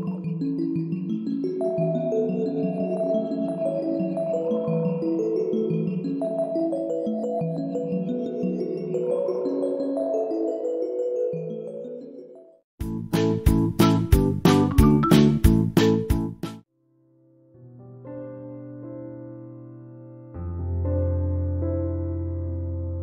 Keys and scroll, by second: 1.4 shift+Right, 2.6 shift+Right, 4.0 shift+Up, 5.2 shift+Up, 7.8 ctrl+7.